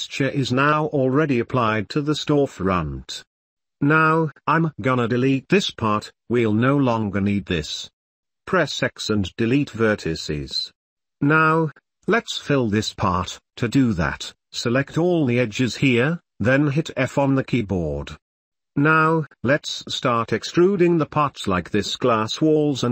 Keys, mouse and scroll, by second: 0.1 middle click, 1.6 Tab, 2.0-3.6 middle drag, 5.3 KP_1, 7.1 x, 8.5 middle click, 8.9 right click, 9.2 middle click, 9.3 right click, 9.5-12.2 drag, 14.1 1, 14.9 2, 15.0 click, 15.6 alt+shift+click, 18.3 f, 18.9-19.9 middle drag, 20.3 Tab, 20.4 click, 21.2 e, 22.6 Tab.